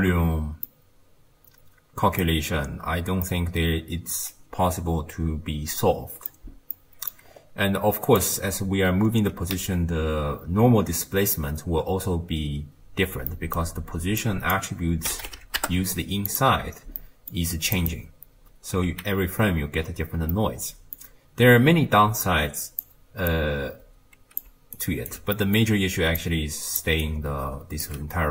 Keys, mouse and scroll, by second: 0.7-6.3 middle drag, 6.8-7.3 middle drag, 7.3-8.0 scroll up 1, 8.0 scroll up 2, 8.1 click, 9.0-10.0 scroll up 2, 10.0 m, 11.9-13.3 scroll down 1, 13.3 middle click, 14.2 drag, 17.0-17.8 middle drag, 17.8 click, 18.9 x, 20.4-22.3 middle drag, 22.3 click, 23.3 click, 24.5 d, 24.8 right click, 25.1 d, 25.4 middle click, 26.0 d, 26.2 click, 26.8 d, 27.0 right click, 27.9 d.